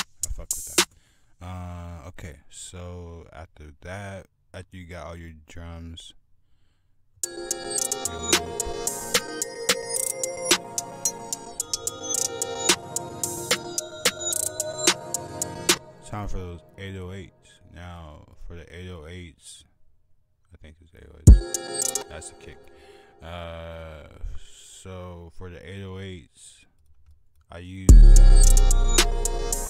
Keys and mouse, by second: 1.1 F1, 1.1 click, 1.2 F1, 1.2 click, 1.4-2.2 drag, 2.3 F1, 5.0 click, 11.0 click, 11.6 F1, 11.7 click, 15.7 click, 16.0 right click, 16.2 right click, 16.4 F1, 17.7-18.3 right drag, 24.6 F1, 24.6-25.6 right drag, 26.4 right click, 28.8 click, 29.5-29.6 drag.